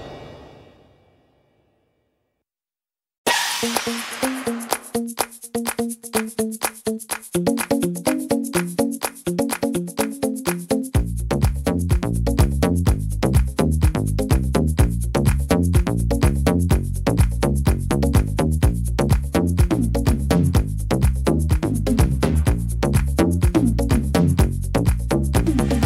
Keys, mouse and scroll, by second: 0.9 e, 2.9 ctrl+z, 3.9 ctrl+z, 4.3 middle click, 4.9-5.5 scroll up 9, 5.5 middle click, 6.4 right click, 7.1 middle click, 7.7 shift+middle click, 8.4-9.4 scroll down 12, 9.4 middle click, 10.1 scroll down 3, 10.5 middle click, 12.5 scroll up 2, 12.9 middle click, 14.2 right click, 15.1 l, 15.8 middle click, 16.7 scroll up 4, 17.1 middle click, 18.1 right click, 18.8 right click, 19.4 right click, 20.1 l, 21.8 shift+d, 23.0 click, 24.3 middle click, 25.5 click.